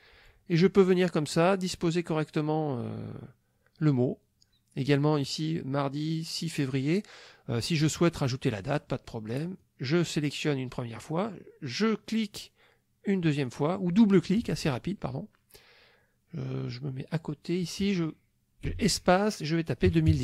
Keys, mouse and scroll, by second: 9.4 click, 13.2 click, 16.7 click, 18.7 space, 19.9 KP_2, 20.1 KP_0.